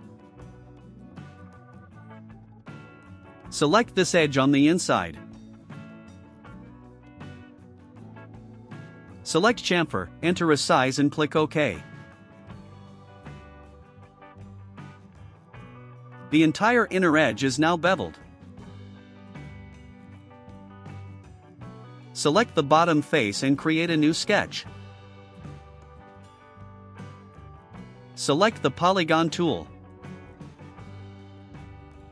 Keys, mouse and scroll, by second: 1.4 click, 5.4 click, 10.3 click, 14.1 click, 15.0 middle drag, 16.7 click, 17.0 scroll down 1, 22.2 click, 26.0 click, 27.2 right click.